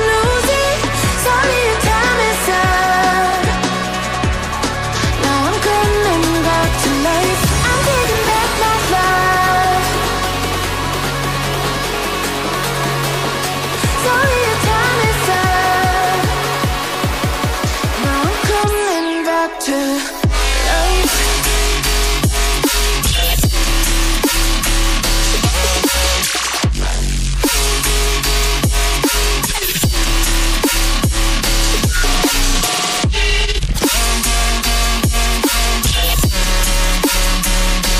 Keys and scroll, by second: 2.0 ctrl+a, 2.0 ctrl+d.